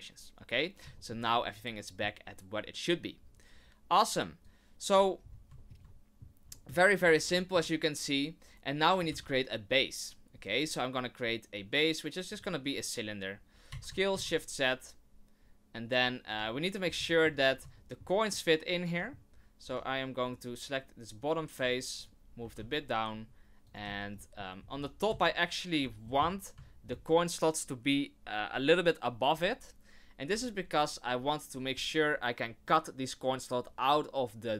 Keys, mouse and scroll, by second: 0.9 shift+middle click, 1.3 middle click, 4.4 click, 5.2 scroll up 3, 5.6 shift+middle click, 5.8 middle click, 6.5 shift+middle click, 7.0 scroll down 2, 7.3 shift+middle click, 9.1 shift+a, 13.7 s, 17.0 shift+middle click, 17.4 scroll up 2, 17.7 shift+middle click, 18.3 middle click, 19.2 scroll down 2, 19.6 Tab, 20.2 right click, 21.6 click, 21.9 right click, 22.4 g, 23.8 z, 24.2 middle click, 24.6 scroll up 2, 24.7 Tab, 25.1 z, 25.9-26.5 shift+scroll up 4, 26.0 shift+middle click, 26.6 shift+middle click, 30.2 scroll down 6, 30.7 right click.